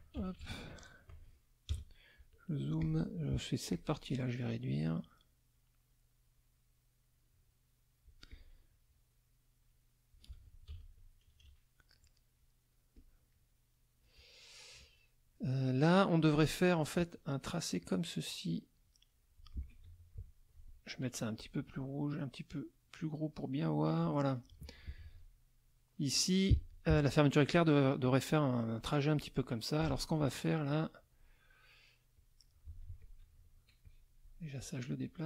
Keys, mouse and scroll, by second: 0.1 ctrl+KP_5, 1.7 KP_Add, 2.8 click, 3.7 click, 5.0-8.2 drag, 8.3 click, 8.9-10.3 drag, 10.6 ctrl+KP_5, 11.2 ctrl+KP_Subtract, 12.0 middle click, 12.9 click, 15.0 middle click, 16.7 click, 17.8-19.5 drag, 19.8 F2, 21.3 shift+click, 22.8-24.0 right drag, 24.3 middle click, 25.0 F2, 26.5 F1, 29.8 Delete, 30.3 middle click, 32.1 click, 32.6 F2, 33.0 click, 33.8 shift+click, 35.0-35.2 drag.